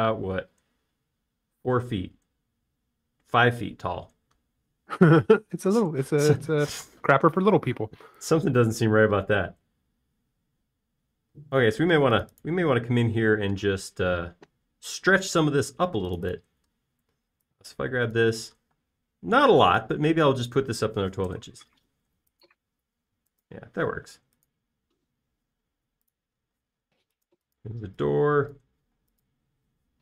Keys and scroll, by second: 1.8 typing, 4.6 space, 8.9 l, 11.4 space, 13.4 typing, 19.9 m, 21.8-23.1 typing, 24.8 m, 27.5 space, 29.8 typing.